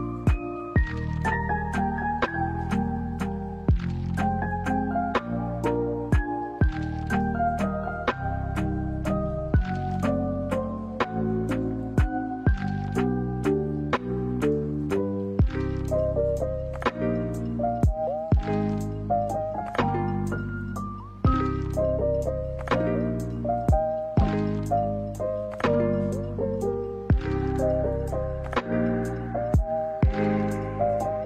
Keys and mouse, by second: 1.5 middle click, 2.7 middle click, 3.6 shift+middle click, 4.0 middle click, 4.8 s, 6.3-7.6 drag, 9.0 middle click, 11.1 shift+middle click, 11.4 middle click, 12.6 KP_1, 14.1 e, 17.9-18.9 middle drag, 26.0 middle click, 27.7 middle click, 28.1 shift+middle click.